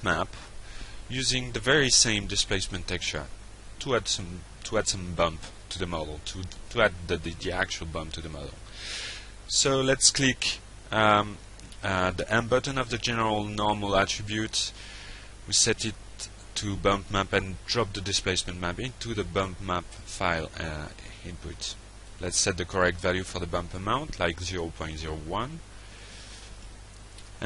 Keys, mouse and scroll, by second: 0.3 click, 1.1 click, 1.5 click, 2.9 click, 4.6 click, 6.8 click, 8.3 click, 9.2 click, 11.8 alt+Tab, 15.3 click, 18.5 click, 19.8 shift+0, 19.9 shift+1, 20.4 Return, 22.3 click.